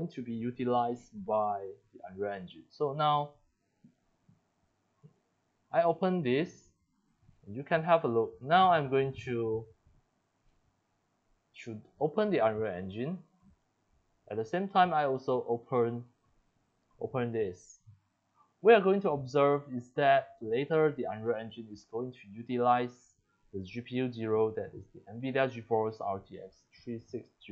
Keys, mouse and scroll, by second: 3.1 click, 4.0 click, 5.0 click, 6.0 click, 6.8-7.8 drag, 9.1 click, 9.5 click, 10.4 click, 11.5 click, 11.7 click, 12.6 double click, 13.4 click.